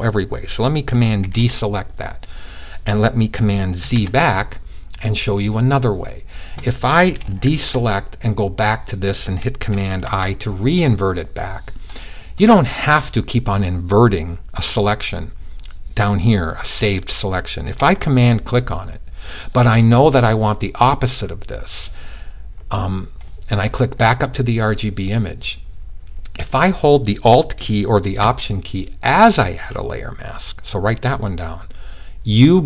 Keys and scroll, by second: 0.8 super+d, 3.2 super+z, 7.0 super+d, 9.4 super+i.